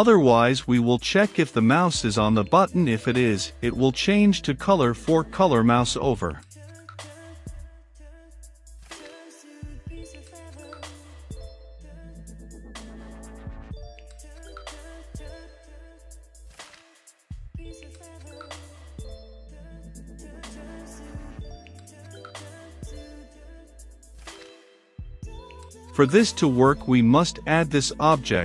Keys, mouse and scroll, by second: 0.5 Return, 1.4 l, 1.5 s, 2.2 space, 2.7 shift+], 2.9 Return, 3.7-4.2 typing, 4.9 Return, 6.0 c, 6.2 u, 6.3 s, 6.7 Return, 7.1 >, 9.0 h, 9.2 o, 9.9 v, 10.1 e, 10.9 Down, 11.1 Return, 11.3-13.0 typing, 13.7 Down, 14.3 Return, 14.9-16.7 typing, 17.4 Down, 17.9 Return, 19.4-24.8 drag, 24.8 middle click, 25.5-26.7 drag, 26.7-27.5 typing, 28.2 Return.